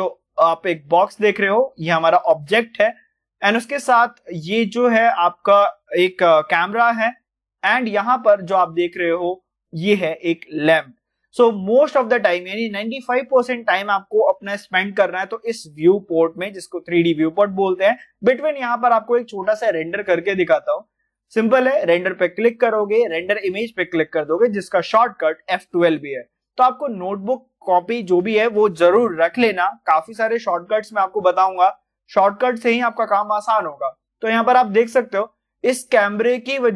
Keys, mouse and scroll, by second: 0.1 click, 0.1-22.9 middle drag, 22.9 click, 23.7 click, 26.1-35.1 drag, 35.1-36.5 drag, 36.5-36.7 middle drag.